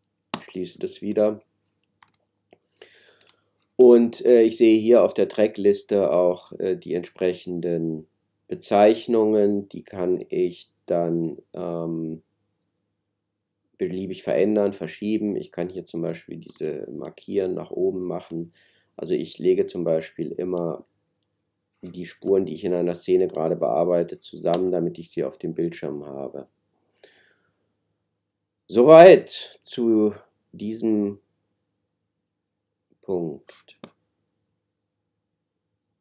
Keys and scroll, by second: 2.0 super+s.